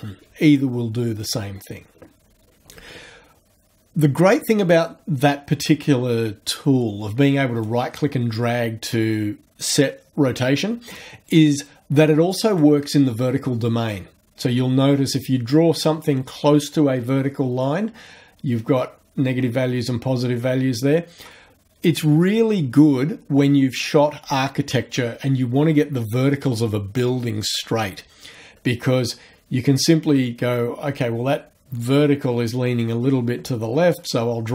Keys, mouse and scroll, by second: 7.7-11.1 right drag, 12.6-21.4 right drag, 34.0-34.5 right drag.